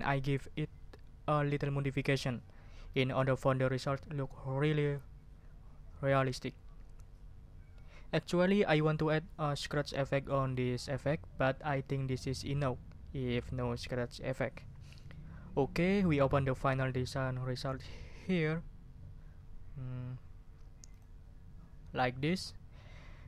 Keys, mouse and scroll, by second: 20.9 click.